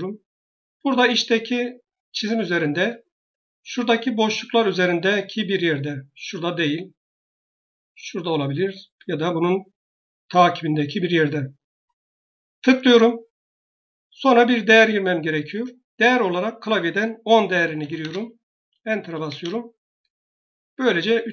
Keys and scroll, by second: 15.6-16.4 typing, 17.6 typing, 19.1 Return.